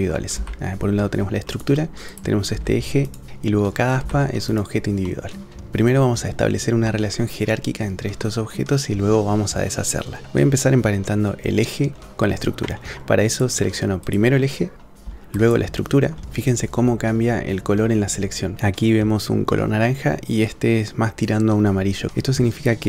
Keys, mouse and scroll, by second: 0.3 g, 2.1 click, 2.6 g, 3.3 g, 4.0 g, 5.0 click, 6.9-7.6 drag, 8.2 middle click, 13.3 click, 14.0 click, 15.4 shift+click.